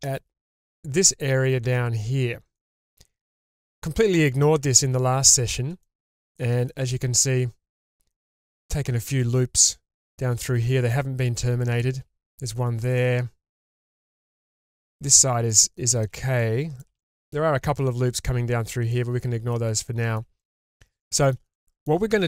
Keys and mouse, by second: 2.6-3.3 shift+middle drag, 5.2 shift+middle click, 5.8-6.1 middle drag, 6.4 shift+middle drag, 6.9-7.2 middle drag, 13.0-13.6 middle drag, 13.9 shift+middle click, 14.6-15.2 shift+middle drag, 15.5 shift+middle drag, 16.4-16.8 middle drag, 17.0 shift+middle drag, 18.9-19.5 middle drag, 19.8-20.2 middle drag, 20.4 shift+middle drag, 21.0 middle click, 21.5-21.9 shift+middle drag.